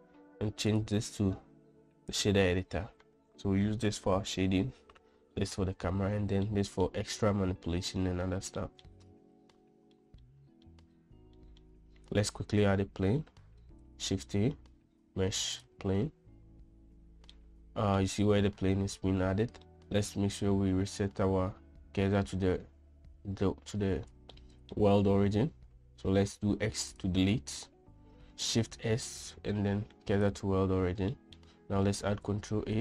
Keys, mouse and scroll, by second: 1.3-2.8 drag, 7.0-7.4 middle drag, 9.2 middle drag, 10.2 shift+middle drag, 10.8-11.2 middle drag, 11.9 shift+middle click, 13.2 ctrl+a, 14.5 shift+a, 18.0-18.6 middle drag, 24.9-25.3 shift+middle drag, 26.6 x, 29.3 shift+s, 31.7 middle click, 32.6 shift+a.